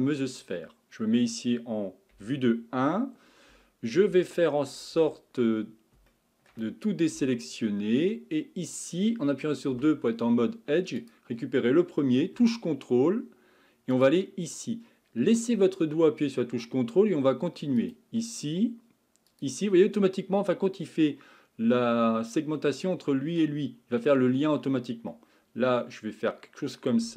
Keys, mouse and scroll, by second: 2.1 KP_1, 3.5 Tab, 4.3-5.0 shift+middle drag, 5.0 Tab, 6.1-7.2 shift+middle drag, 7.2 a, 11.0 click, 13.9 ctrl+click, 17.8 ctrl+click, 19.3 ctrl+click, 25.1-27.1 middle drag.